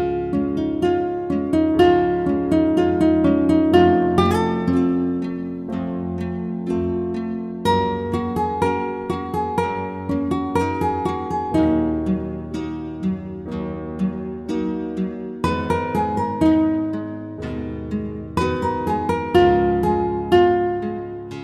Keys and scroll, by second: 1.0 alt+shift+Return, 2.5 ctrl+t, 3.4 ctrl+alt+t, 4.0 ctrl+alt+shift+t, 20.4 Return.